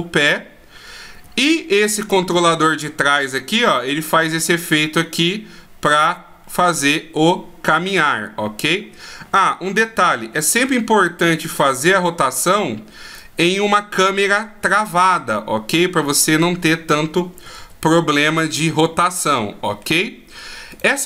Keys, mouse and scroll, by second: 2.3 right click, 3.4 r, 9.9 KP_1, 10.3 KP_3, 11.6 r, 13.7 middle click, 17.7 ctrl+z, 18.3 middle click, 20.9 right click.